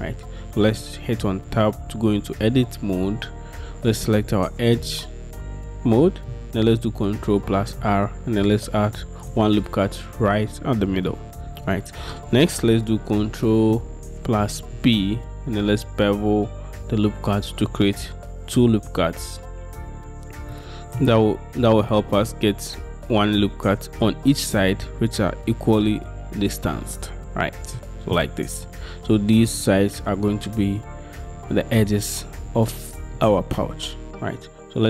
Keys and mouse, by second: 1.4 Tab, 7.7 ctrl+r, 9.7 click, 14.8 ctrl+b, 21.0 click, 27.8 click.